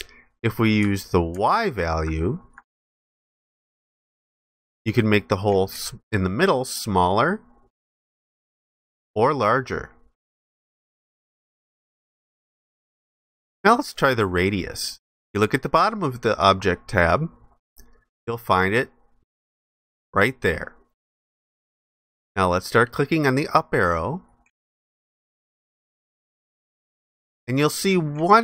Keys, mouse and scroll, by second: 1.5 ctrl+alt+click.